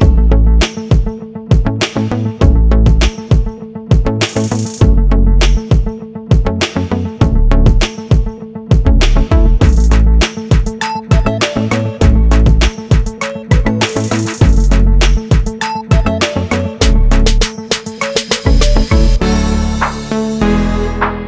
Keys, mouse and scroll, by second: 0.3 scroll up 1, 2.5 F8, 5.2 click, 6.8 scroll down 1, 7.1 scroll up 1, 8.5 scroll up 1, 10.0 F8, 10.8 g, 12.8 click, 14.4 scroll down 1, 15.8 ctrl+click, 16.6 F8, 19.2 click, 21.0 scroll up 1.